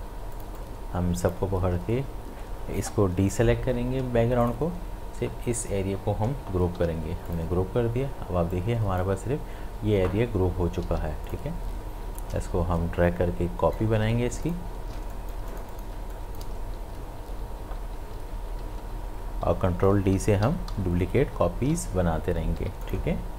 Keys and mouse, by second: 0.3-3.7 drag, 0.9-3.3 drag, 4.0 click, 6.8 ctrl+g, 7.3-10.8 drag, 10.8 ctrl+z, 11.3 click, 12.2-14.2 alt+drag, 14.2 space, 14.4 ctrl+alt+click, 15.0 ctrl+alt+space, 15.1 ctrl+click, 16.1 click, 16.6 ctrl+d, 22.6 v, 22.9 click.